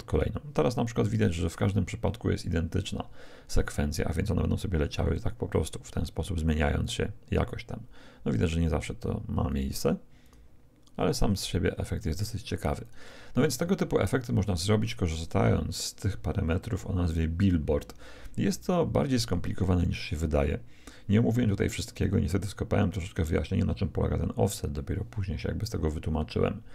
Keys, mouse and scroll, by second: 5.5-8.5 drag, 9.5-14.7 drag, 25.9-26.7 middle drag.